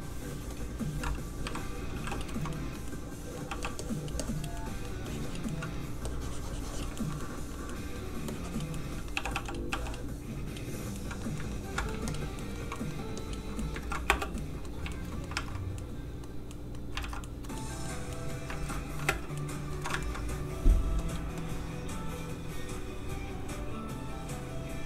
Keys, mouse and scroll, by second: 0.5 click, 1.4 shift+i, 2.0 f, 2.1 click, 2.3 shift+middle click, 3.5 f, 3.8 click, 4.5 middle click, 5.1 click, 5.5 middle click, 6.0 click, 7.0 shift+middle click, 8.3 click, 8.7 middle click, 9.1 g, 9.3 f, 9.7 click, 9.7 f, 9.8 click, 10.9 middle click, 11.5 ctrl+middle click, 12.1 shift+click, 12.4 shift+middle click, 13.2 click, 13.6 middle click, 13.8 ctrl+z, 14.1 space, 14.4 middle click, 14.9 shift+middle click, 15.3 alt+shift+a, 15.8 a, 15.9 middle click, 17.0 alt+shift+z, 17.6 shift+middle click, 17.7 middle click, 18.5 alt+shift+z, 19.0 shift+z, 19.1 space, 19.4 middle click, 19.8 middle click, 19.9 ctrl+middle click, 21.0 ctrl+click, 21.1 click.